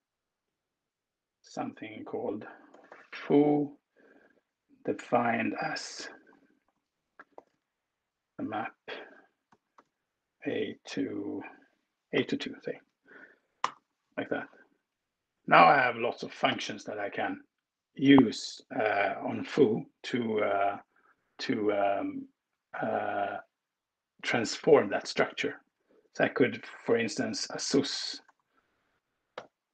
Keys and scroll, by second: 2.0-2.9 typing, 7.0 alt+shift+8, 7.4 shift+., 9.3 a, 9.5 space, 12.0 2, 13.4 alt+Return, 14.2 Right, 14.6 Right, 15.2 Return, 15.6 Return, 16.2 shift+8, 26.1-28.2 typing, 29.2 b.